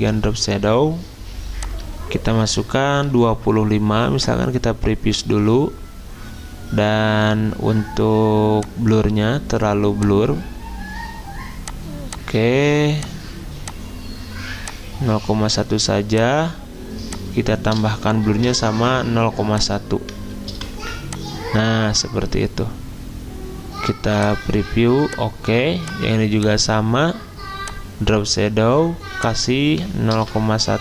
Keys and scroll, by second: 2.7-3.6 typing, 18.3 ctrl+c, 20.5 ctrl+v, 30.1 ctrl+v.